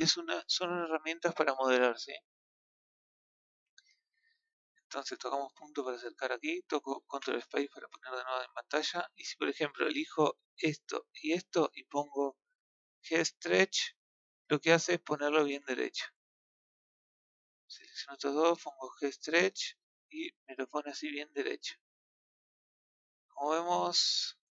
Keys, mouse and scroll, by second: 3.5 scroll up 1, 3.9-4.7 scroll down 1, 4.7-5.5 scroll down 3, 5.5 KP_Decimal, 7.0 ctrl+space, 7.4 scroll down 1, 7.5 scroll up 1, 7.9 shift+middle click, 8.6-9.6 scroll down 1, 9.6-10.0 middle drag, 10.6 click, 11.1 shift+click, 14.1-15.2 drag, 16.5 click, 17.2 shift+click, 19.5 click, 20.0-23.0 middle drag, 23.4-24.5 middle drag.